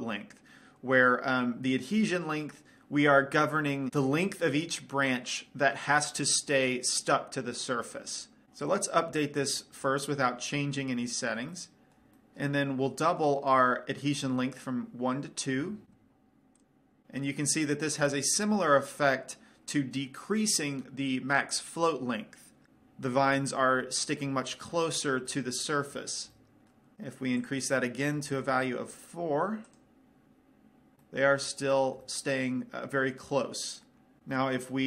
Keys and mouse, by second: 10.2-11.5 drag, 11.5-14.9 middle drag, 14.9-16.2 drag, 16.9 click, 23.8-27.7 middle drag, 27.7-29.6 drag, 30.5 click, 31.4 middle click, 32.2-34.2 middle drag, 34.7 middle click.